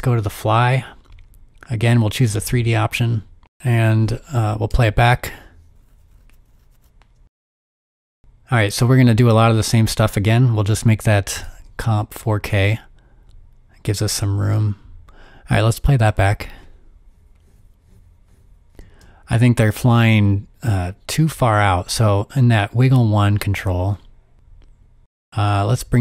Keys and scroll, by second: 4.5-5.3 typing, 10.7 super+k, 13.5 s, 14.7 z, 15.5 o, 18.3 space, 18.7 space.